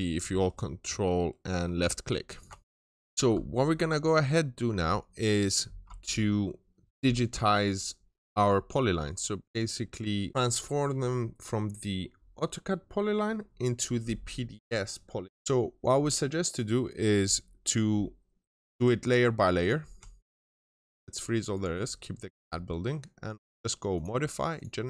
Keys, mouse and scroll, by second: 2.9 scroll up 1, 3.0 click, 18.9 double click, 19.4 click, 19.8-20.2 shift+middle drag, 20.0 shift+click.